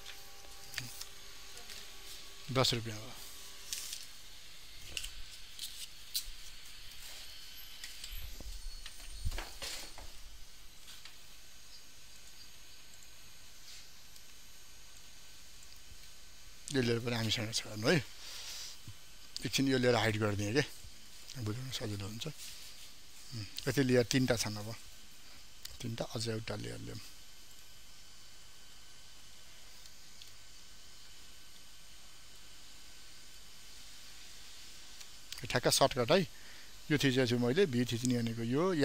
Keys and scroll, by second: 30.2 ctrl+d.